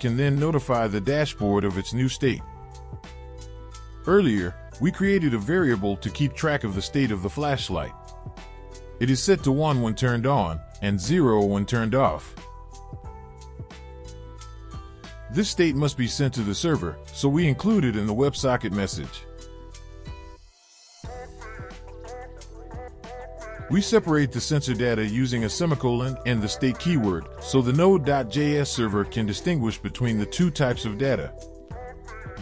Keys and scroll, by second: 22.7 ctrl+v.